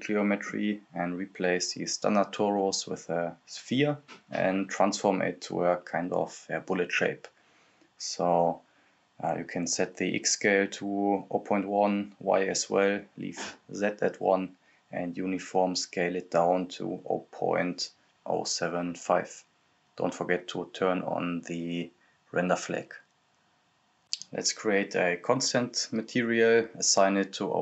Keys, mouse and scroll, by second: 0.9 click, 3.0-3.5 scroll down 1, 3.5 click, 5.0 right click, 5.8-7.2 typing, 8.9 click, 11.5 Return, 12.2 click, 13.2 Return, 15.0 click, 16.1 Return, 17.2 Return, 17.2 click, 17.9-18.3 scroll down 1, 18.3-19.5 drag, 19.5 h, 20.1 click, 20.8 u, 22.1 click, 23.2 scroll down 1, 23.8 click, 25.0 scroll down 1, 25.1 click.